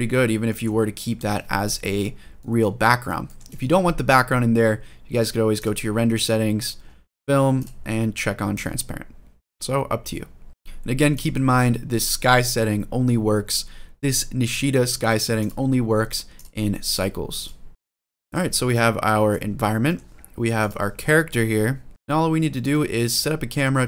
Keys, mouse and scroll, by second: 0.3 middle click, 0.8 scroll down 1, 1.8 scroll down 1, 2.2 middle click, 2.6 scroll up 1, 3.0 shift+middle click, 5.3 click, 6.2-7.3 scroll down 2, 7.3 click, 8.3 click, 10.5-10.9 shift+middle drag, 10.9 click, 11.4 scroll down 1, 15.1-16.2 drag, 16.7-17.2 drag, 17.7 shift+middle click, 17.7-18.1 scroll down 2, 18.1 click, 18.4-19.0 scroll up 2, 18.8 middle click, 19.2 scroll down 1, 19.7 middle click, 20.4 click, 20.7 scroll down 1, 21.0-21.7 scroll up 4, 21.9 middle click, 22.0 scroll down 1, 22.1 scroll down 1, 22.5-22.9 middle drag, 23.1-23.6 scroll up 2, 23.7 shift+middle drag.